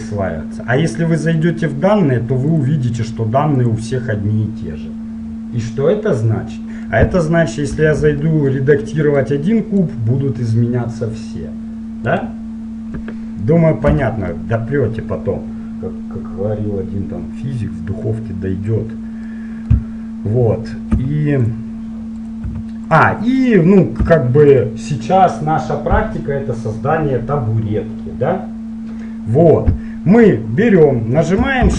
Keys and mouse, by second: 1.5-5.6 drag, 7.0-9.4 middle drag, 8.0 Tab, 9.4 right click, 10.0-11.0 middle drag, 11.0 click, 14.1 Tab, 14.5-16.1 middle drag, 21.1 x, 22.6 x, 24.1 x.